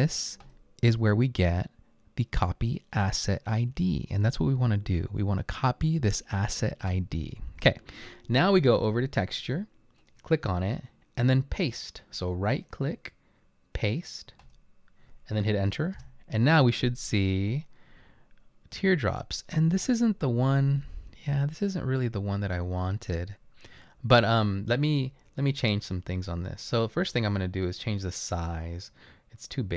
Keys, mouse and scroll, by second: 14.4 right click, 16.0 Return, 27.1-27.9 scroll up 2.